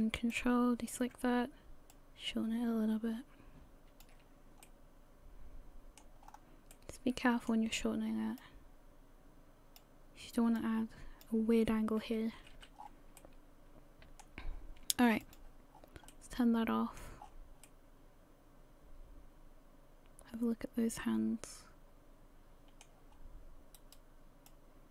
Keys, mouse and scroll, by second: 0.3 ctrl+click, 1.9 click, 4.0 click, 4.6 middle click, 6.2 scroll up 4, 6.7 middle click, 8.4 click, 10.6 click, 12.4 a, 12.6 a, 12.8-13.2 scroll down 6, 13.2 middle click, 15.2 click, 15.7 scroll down 1, 16.1 middle click, 17.2-17.6 scroll up 6, 17.6 middle click, 23.1 scroll up 2, 23.8 right click, 24.5 click.